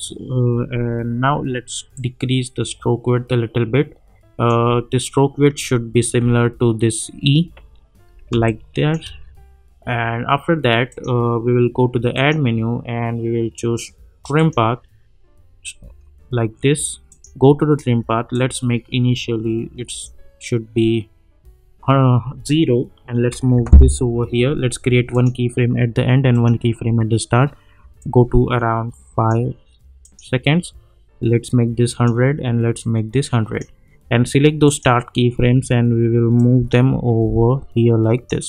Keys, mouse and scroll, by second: 0.0-0.5 alt+scroll up 1, 0.8 alt+scroll down 1, 1.9-4.7 drag, 5.2-5.6 alt+scroll up 1, 6.3-7.0 alt+scroll down 1, 7.0-8.0 alt+scroll up 1, 8.3 space, 8.4-9.0 click, 8.8 space, 10.9 click, 14.5 click, 17.1-20.2 drag, 23.5 [, 25.1-29.5 drag.